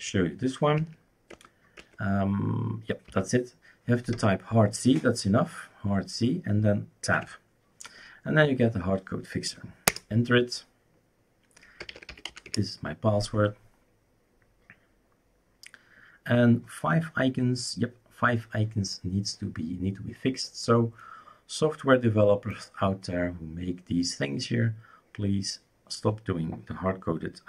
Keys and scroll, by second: 0.0-0.8 typing, 1.3 Tab, 1.8 Tab, 3.1 typing, 7.1 Tab, 9.8 Return, 11.6-12.8 typing.